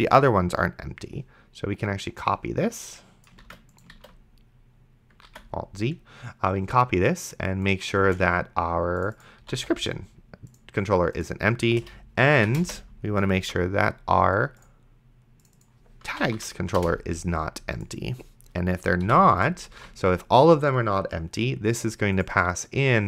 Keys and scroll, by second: 3.7 ctrl+c, 4.2 ctrl+v, 5.6 alt+z, 8.0 space, 9.2-10.1 typing, 11.7 space, 12.5 shift+7, 12.6 space, 13.7 ctrl+v, 15.9-16.8 typing, 19.0 ;, 20.0 ctrl+s.